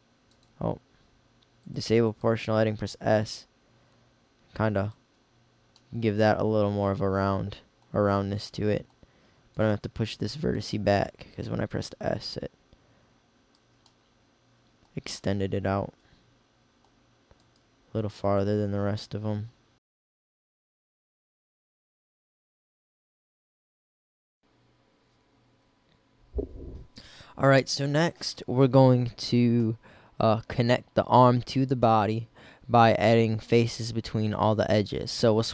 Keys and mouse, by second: 2.6 s, 6.2 middle click, 20.0 middle click, 21.7 middle click, 22.2 g, 22.5 click, 23.2 click, 23.3 g, 23.6 g, 23.9 click, 33.5-35.4 middle drag.